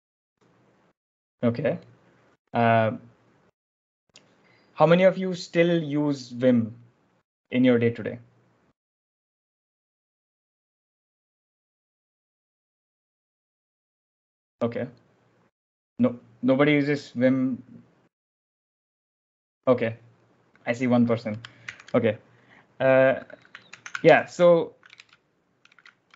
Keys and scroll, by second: 22.5 ctrl+alt+shift+super+l, 24.1 ctrl+j, 24.5 1, 25.0 Tab, 25.0 BackSpace, 25.7 BackSpace.